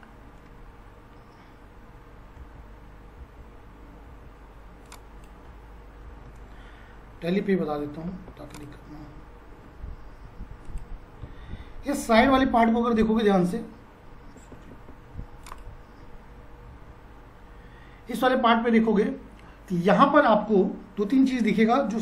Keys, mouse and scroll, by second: 2.4 F5, 8.3 ctrl+z, 8.5 click, 12.9 F3, 15.5 click, 16.7 F4.